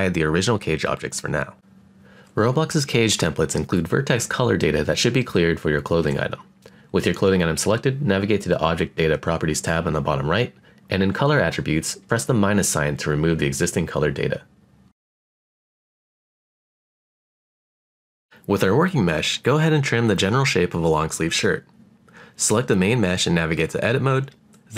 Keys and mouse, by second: 0.8 click, 3.1-4.0 middle drag, 6.4 click, 7.7 click, 8.7-10.9 drag, 12.2 click, 13.3 click, 15.0 click, 16.0 click, 17.9-19.3 drag, 20.0 click, 20.5-21.7 middle drag, 23.8 click, 24.4 click.